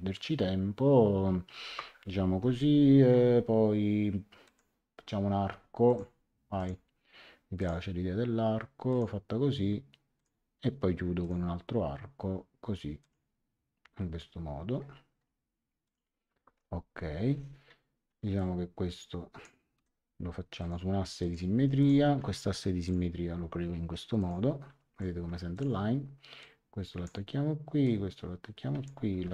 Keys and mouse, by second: 2.3 Escape, 4.4 click, 5.8 click, 7.6 click, 8.9 click, 10.1 click, 11.2 click, 13.0 click, 15.8 click, 16.4 Escape, 18.3 click, 20.6 click, 21.5 Escape, 21.7 click, 22.8 click, 24.2 click, 24.8 Escape, 25.5 click, 27.8 click, 29.1 ctrl+z.